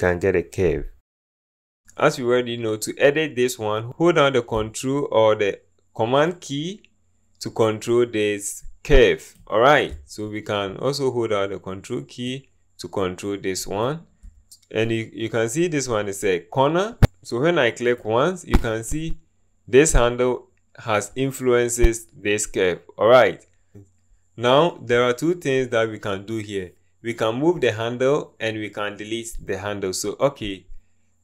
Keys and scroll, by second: 17.0 ctrl+z.